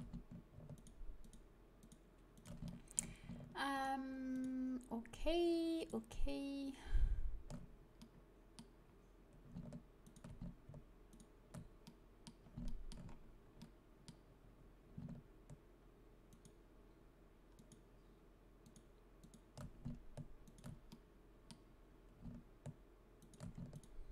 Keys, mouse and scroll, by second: 2.8-7.3 drag, 7.9-10.0 middle drag, 10.0-11.8 right drag, 12.4 middle click, 16.3-20.9 right drag, 20.9-22.3 drag, 21.1-22.3 right drag, 22.3-23.6 middle drag, 23.2-24.1 right drag.